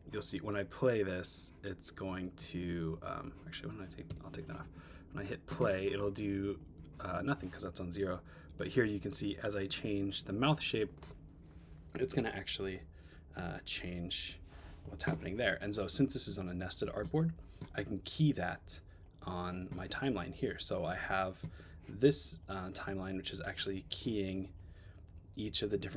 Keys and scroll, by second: 4.1 BackSpace, 8.1 Up, 10.3 Up, 11.4 Up, 13.0 Down, 13.7 Down.